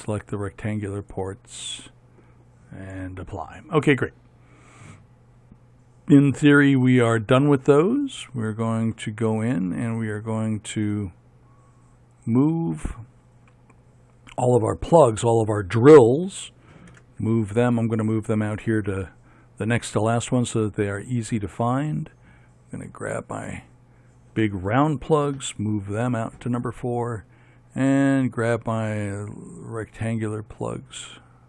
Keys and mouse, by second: 17.1 m, 23.3-25.3 right drag, 25.6 m, 29.1-31.4 right drag.